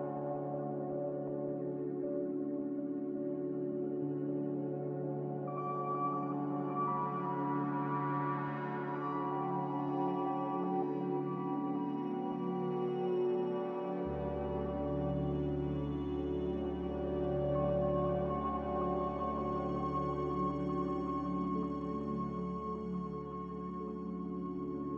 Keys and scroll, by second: 4.3 g, 5.6 n, 13.6 z, 17.1 typing, 17.2 Return, 21.1 ctrl+z.